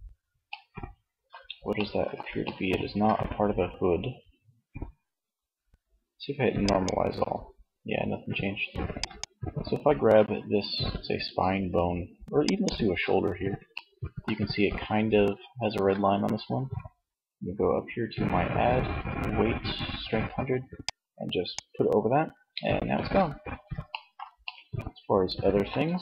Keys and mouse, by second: 11.6 click, 12.5 shift+middle click, 20.0-21.7 drag, 21.9 middle click, 23.1 middle click, 24.0-25.4 middle drag.